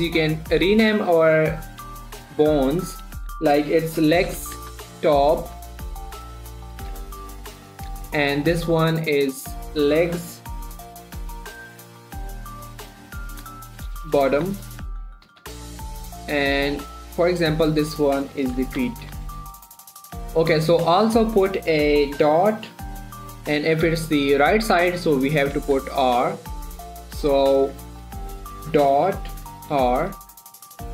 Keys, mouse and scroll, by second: 4.3-5.9 typing, 7.0 typing, 7.5 Return, 8.9 click, 10.9-13.9 typing, 15.5 typing, 15.9 Return, 17.2 click, 17.4 middle click, 18.2 click, 19.0-20.0 typing, 19.7 Return, 25.7 shift+Num_Lock, 26.0 shift+r, 26.8 click, 30.2 shift+r, 30.5 click.